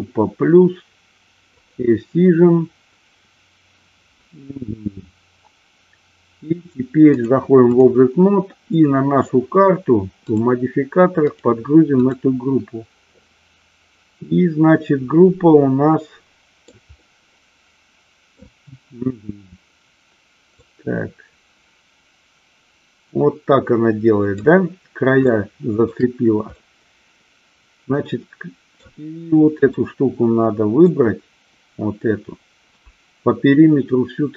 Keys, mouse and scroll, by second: 0.0 click, 1.6 click, 7.3-8.0 drag, 10.4 click, 11.5 click, 13.4-16.9 middle drag, 17.1-18.5 middle drag, 20.7-24.5 drag, 25.4-26.0 shift+middle drag, 26.6-28.9 middle drag, 29.9-31.0 middle drag.